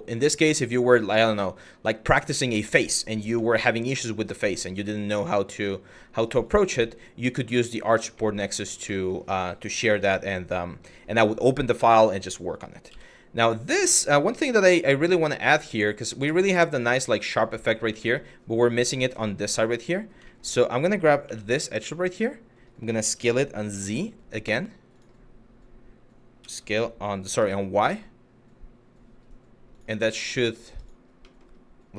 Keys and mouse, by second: 1.4 middle click, 2.3 middle click, 3.1 middle click, 3.7 middle click, 4.4 Tab, 4.7-5.0 middle drag, 6.1 click, 6.5 middle drag, 7.2 shift+middle drag, 7.9 middle click, 8.6 shift+middle drag, 9.6 1, 10.6 middle click, 12.5 z, 14.3 shift+middle drag, 16.0 shift+middle drag, 17.7 shift+middle click, 18.7 click, 19.0 Tab, 19.6 middle click, 20.0 middle click, 20.9 2, 21.4 alt+click, 21.9 middle click, 22.6 d, 26.0 s, 27.0 y, 29.3 click, 29.8 middle click, 31.0 middle click, 31.7 Tab.